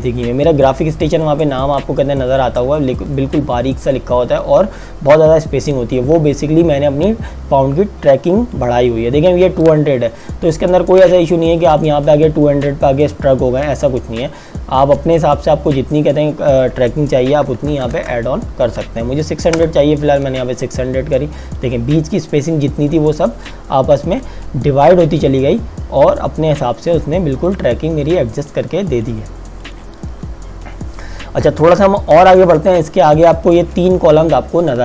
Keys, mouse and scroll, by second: 1.2 click, 8.6 click, 11.7 click, 17.5 KP_6, 17.7 KP_0, 19.5 KP_Enter, 21.6 click, 27.5 click.